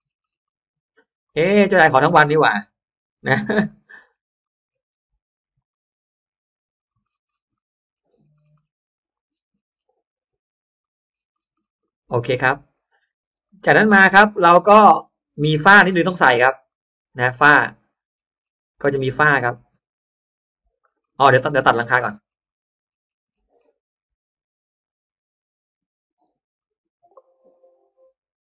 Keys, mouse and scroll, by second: 1.0 click, 1.4 scroll down 1, 2.0-2.6 scroll up 2, 2.8 click, 3.1 scroll down 1, 3.2 scroll up 1, 3.6 middle click, 4.3-5.1 scroll up 2, 4.4 middle click, 5.5 drag, 6.7 click, 7.1 scroll down 1, 7.4 middle click, 7.8 scroll down 1, 8.3-8.7 scroll up 1, 8.9 click, 9.2 scroll up 1, 9.2-10.0 scroll down 1, 10.0-10.4 scroll up 1, 10.7 click, 11.0-11.6 scroll down 1, 11.8 middle click, 13.4 middle click, 14.0-14.3 scroll down 1, 14.3-14.9 scroll up 1, 14.4 space, 15.9 click, 16.3 scroll down 1, 16.6 middle click, 17.0-17.7 scroll down 2, 17.7 middle click, 18.2-20.6 scroll up 4, 20.6 scroll down 1, 21.0 middle click, 21.5-21.8 scroll down 1, 22.0-22.6 scroll up 2, 22.4 middle click, 22.8-23.2 scroll down 1, 23.2-23.8 scroll up 1, 25.4 click, 26.5 click, 28.2 click.